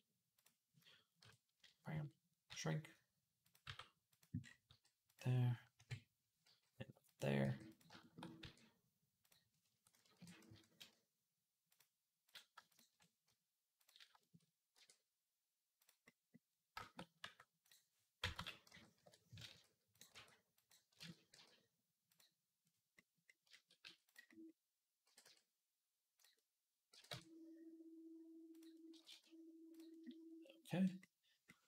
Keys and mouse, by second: 1.0 KP_1, 2.3 s, 3.4 middle click, 3.4 g, 4.5 g, 5.5 KP_3, 6.2 g, 7.2 g, 7.5-10.0 shift+drag, 8.2 e, 9.9 ctrl+l, 10.0-13.6 middle drag, 10.3 q, 12.4 shift+a, 13.6 click, 13.7 shift+middle click, 14.5 e, 17.0 r, 18.1 ctrl+z, 18.5 ., 19.3 s, 19.9-23.6 middle drag, 19.9 r, 20.8 ctrl+z, 21.1 g, 23.6 s, 24.8 g, 26.7 g, 28.7 g.